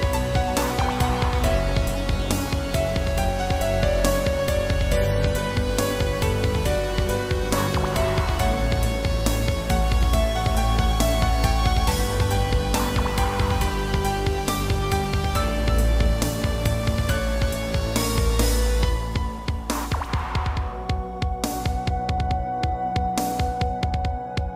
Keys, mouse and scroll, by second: 0.0-1.4 typing, 1.7 click, 3.5 g, 4.5 Escape, 5.2 a, 5.6 scroll down 1, 6.4 scroll down 1, 6.8 middle click, 9.4 Right, 10.4 i, 11.0 Right, 12.7 middle click, 14.1 middle click, 14.9-15.4 typing, 15.5 click, 17.1 click, 19.0 click, 24.1 g.